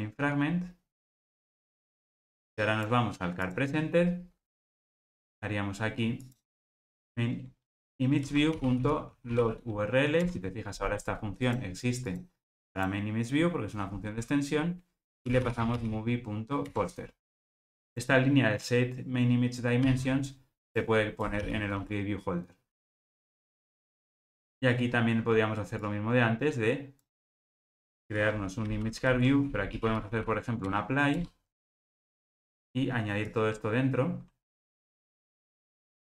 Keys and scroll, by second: 8.2 Return, 16.7 Return, 23.9 super+v, 30.7 Return.